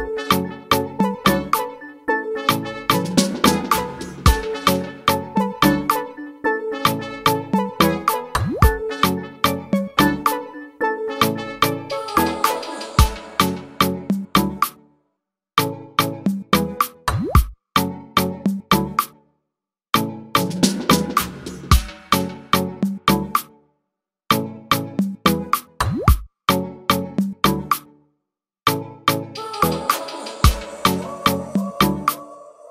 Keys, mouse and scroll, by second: 0.4 click, 0.8 scroll down 2, 1.5 click, 3.1 click, 3.6-4.2 scroll down 3, 4.5 drag, 4.7 scroll down 2, 5.2-9.9 drag, 10.6-13.1 drag, 13.1-13.5 scroll down 2, 14.2 click, 14.6-17.0 scroll up 10, 17.2 ctrl+z, 18.5 ctrl+z, 20.7 ctrl+z, 21.0 ctrl+z, 21.5 ctrl+z, 25.9 click, 26.5 scroll up 2, 27.4 click, 28.1-28.7 scroll down 2, 29.8-32.7 drag.